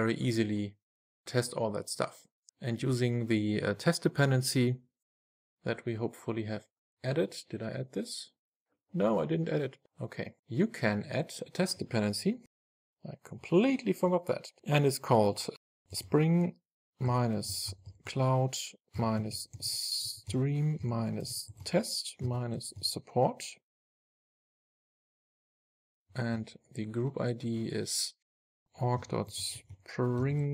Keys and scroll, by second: 13.8 Return.